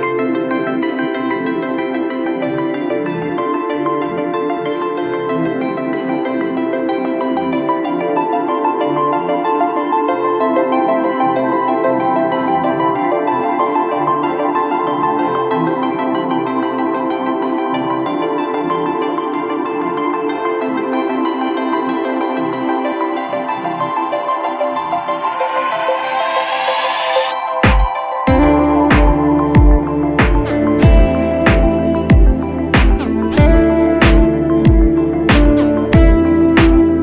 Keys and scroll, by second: 8.0 ctrl+z, 8.3 5, 10.3 x, 13.7 x, 14.7 ctrl+space, 16.6 b, 17.2 x, 19.3 ctrl+space, 20.1 x, 21.0 ctrl+z, 21.3 x, 22.8 x, 23.0 ctrl+z, 23.1 x, 23.7 ctrl+space, 24.4 x, 26.7 ctrl+space, 27.5 r, 28.1 x, 29.5 x, 30.1 Escape, 30.9 r, 31.1 space, 31.4 r, 31.7 w, 34.4 w, 36.2 b.